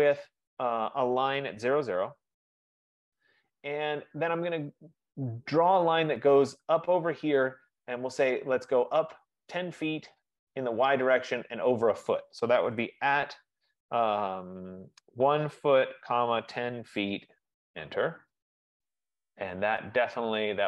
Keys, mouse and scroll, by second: 0.3 click, 1.7-2.1 typing, 2.3 Return, 4.5 typing, 13.1 shift+2, 15.3-17.8 typing.